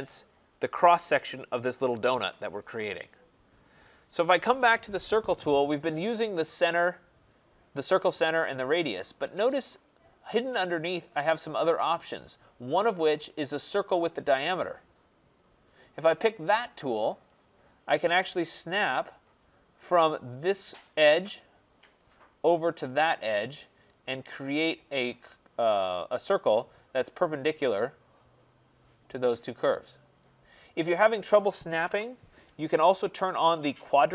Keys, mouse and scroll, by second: 9.8 click, 17.4 click, 22.0 click, 23.4 click, 24.6 right click, 24.9-26.8 scroll, 30.1 right click, 30.9 click, 31.8 Delete.